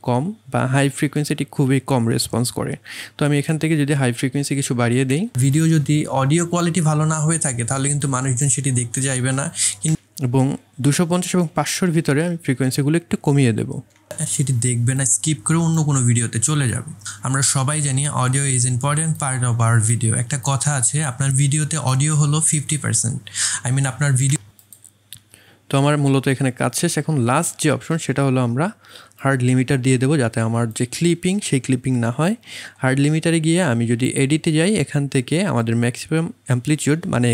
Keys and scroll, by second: 5.1 space, 9.9 space, 13.9 space, 24.3 space.